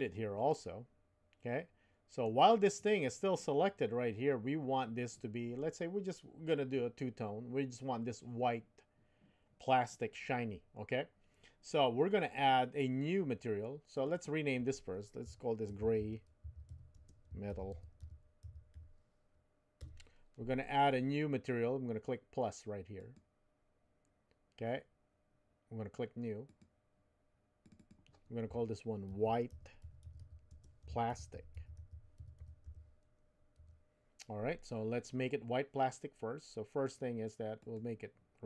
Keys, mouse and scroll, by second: 0.5-2.3 middle drag, 13.9 click, 14.1-20.4 drag, 22.9 click, 26.5-34.7 drag, 37.6 click.